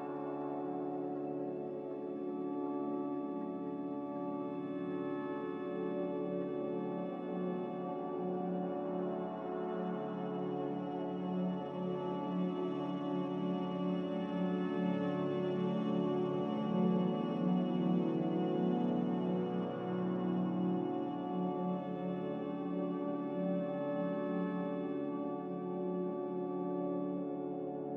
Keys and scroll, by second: 3.2 a, 11.7 z, 14.4-15.2 typing, 16.2 c, 18.2 v.